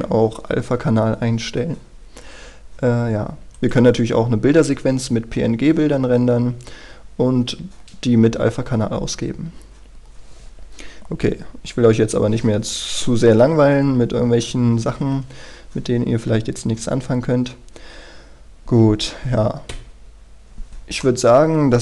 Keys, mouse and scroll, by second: 19.9 Escape, 20.8-21.2 scroll down 1, 21.2-21.8 middle drag.